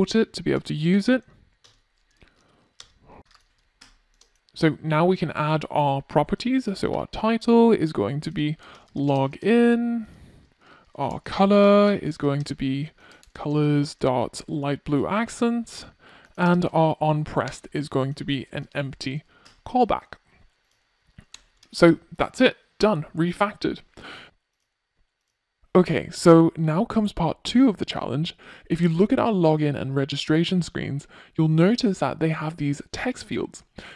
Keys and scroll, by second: 5.2 Return, 10.2 Return, 19.6 super+s, 22.9 super+s.